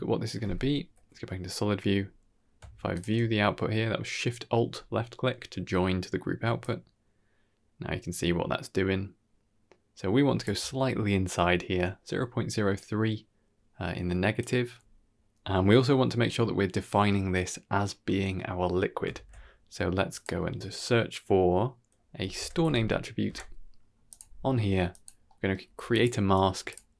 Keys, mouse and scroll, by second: 0.7 z, 1.6 middle click, 1.9-2.5 scroll up 1, 2.8 ctrl+alt+shift+z, 2.8 alt+shift+click, 5.5-6.5 middle drag, 6.5-10.3 shift+drag, 12.1-12.6 scroll up 3, 12.6 middle click, 14.3 click, 15.4 middle click, 15.8 scroll down 1, 15.9 middle click, 19.0 shift+a, 24.5 g, 25.1 middle click, 25.5 g, 26.3 g.